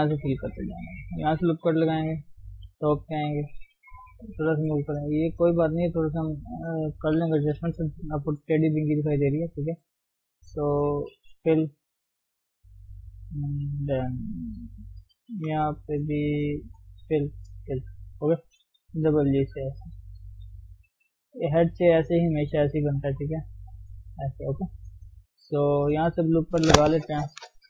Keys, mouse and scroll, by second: 0.0 f, 0.3 middle click, 1.0 scroll up 1, 1.8 ctrl+r, 2.7 KP_7, 4.0 g, 5.4 click, 6.2-6.7 scroll down 1, 6.7-9.1 scroll up 4, 9.1-10.3 middle drag, 10.3 click, 11.4 f, 12.5-14.4 middle drag, 14.4 click, 16.9 f, 17.6 f, 18.3 click, 18.8 g, 20.1 click, 20.3 g, 21.0 scroll down 1, 21.2-22.6 middle drag, 22.6-24.6 scroll down 2, 24.6 middle click, 24.8-25.1 scroll up 1, 25.1 middle click, 25.5 scroll up 1, 26.1-27.6 middle drag.